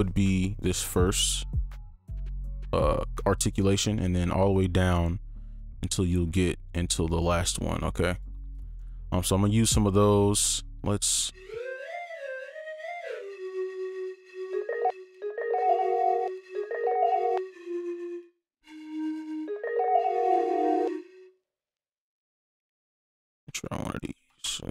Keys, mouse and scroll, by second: 1.3 double click, 8.5 double click, 10.9-13.0 scroll up 1, 14.5 space, 14.9 space, 20.8 space, 23.2 ctrl+click, 23.6 alt+c, 24.1 ctrl+click.